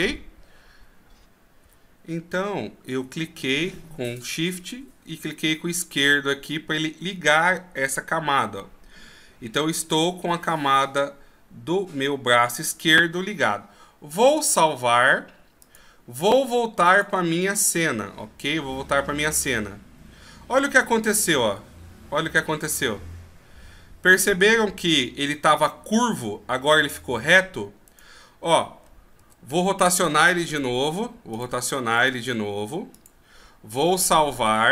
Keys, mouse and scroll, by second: 14.4 click, 16.9 click.